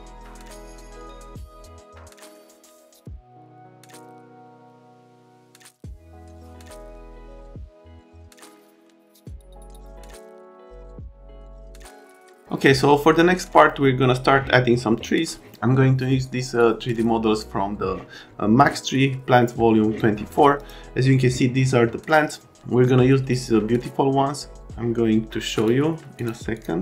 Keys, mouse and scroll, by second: 0.6 click, 1.6 click, 3.0 click, 6.2 click, 6.4 click, 6.5 click, 6.7 click, 8.0 c, 10.8 click.